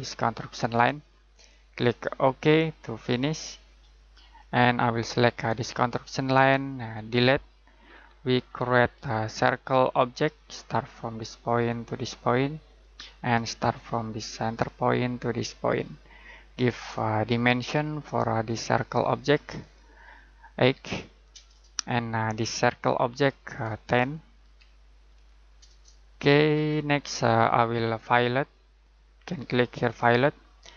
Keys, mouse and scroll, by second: 7.1 Delete, 7.8-9.9 scroll down 1, 9.9 click, 20.7 8, 21.3 Return, 22.5 click, 24.4-25.0 typing, 25.6 Return, 26.4 scroll down 1, 26.6 scroll up 1.